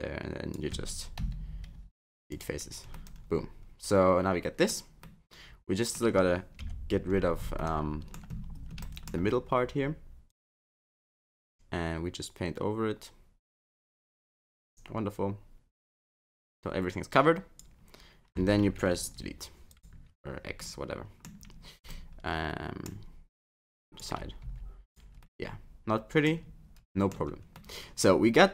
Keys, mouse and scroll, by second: 1.8 Delete, 2.9 middle click, 5.0 middle click, 6.6 KP_3, 7.6 shift+middle click, 8.3-8.6 scroll up 7, 8.8 shift+middle click, 9.2 scroll down 1, 10.3 click, 19.0 Delete, 20.6 middle click, 21.4-21.9 scroll down 5, 21.9 middle click, 23.7 click, 24.4 x, 25.2 middle click, 26.3 scroll down 2, 26.8 middle click, 27.2 Tab, 27.5 middle click.